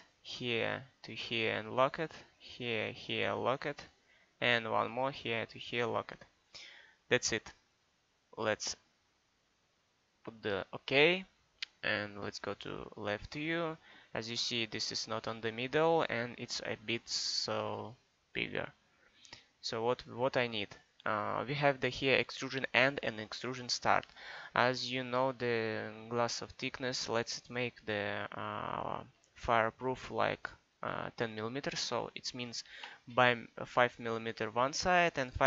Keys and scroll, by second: 32.8 5.